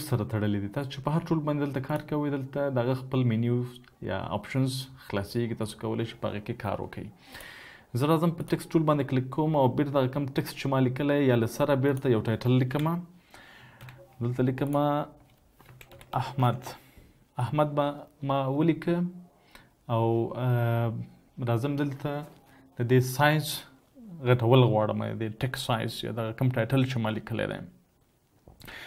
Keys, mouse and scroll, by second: 12.1 Delete, 15.1-15.8 typing.